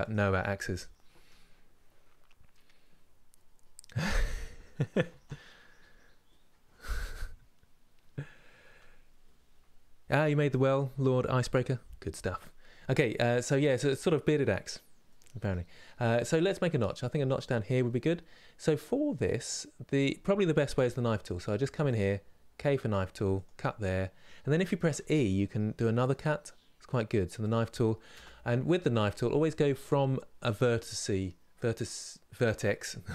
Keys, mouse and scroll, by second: 12.8 middle click, 13.7-14.8 scroll up 2, 14.8-16.0 middle drag, 16.0 scroll up 2, 17.6 middle click, 18.5 scroll up 2, 20.4 k, 28.4-33.1 middle drag.